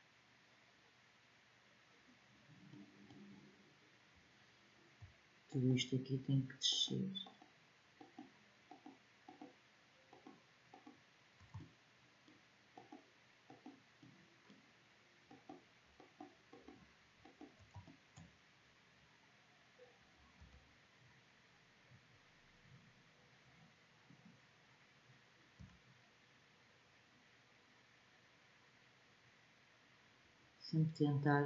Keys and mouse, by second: 2.1-11.2 middle drag, 11.2 click, 20.1 g, 25.3 g.